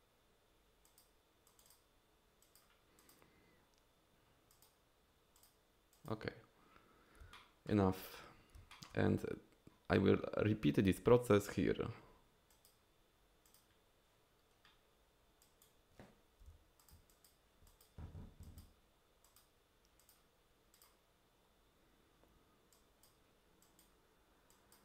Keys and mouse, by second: 0.8 click, 1.5 click, 2.4 drag, 3.0 click, 4.5 drag, 5.4 drag, 5.9 click, 7.3 shift+middle click, 7.5 shift+click, 8.7 shift+click, 12.5 click, 13.5 drag, 15.4 drag, 16.5 f, 17.1 click, 17.7 click, 18.4 click, 19.2 click, 20.0 click, 20.7 click, 22.7 click, 23.6 click, 24.5 click.